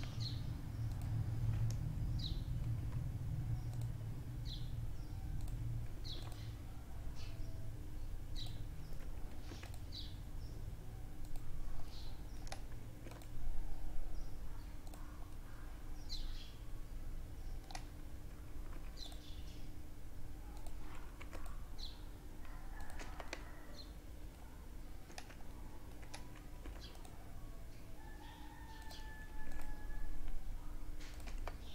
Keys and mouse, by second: 1.6 ctrl+r, 4.9 ctrl+r, 8.3 ctrl+r, 11.8 ctrl+r, 15.0-16.4 middle drag, 17.5 ctrl+r, 20.0 ctrl+r, 22.0 Tab, 22.2-24.1 middle drag, 24.1 Tab, 24.5-27.3 middle drag, 25.4 ctrl+r, 28.3 ctrl+r, 30.2 Tab, 30.8-31.7 middle drag.